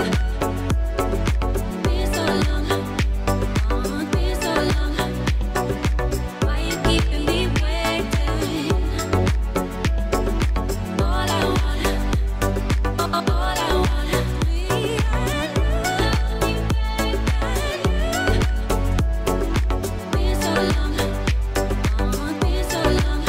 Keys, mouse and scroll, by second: 0.0 middle click, 1.8-2.7 drag, 4.1 g, 5.5 click, 6.1 g, 7.5 click, 9.3-10.4 drag, 11.2-11.6 shift+drag, 12.5 click, 14.6 Tab, 15.0 click, 18.0 a, 21.1 shift+s.